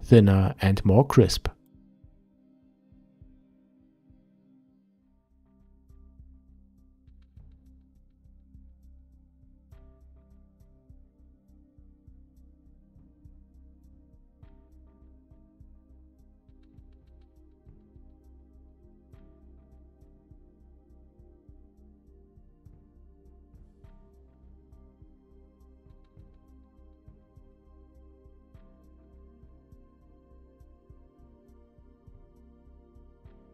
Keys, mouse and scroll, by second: 2.1 click, 3.0-5.1 ctrl+middle drag, 5.1-15.2 drag, 15.2-16.3 middle drag, 16.3-23.1 drag, 23.1-25.0 middle drag, 25.0-27.7 shift+drag, 27.7-31.6 middle drag, 31.6-33.5 drag.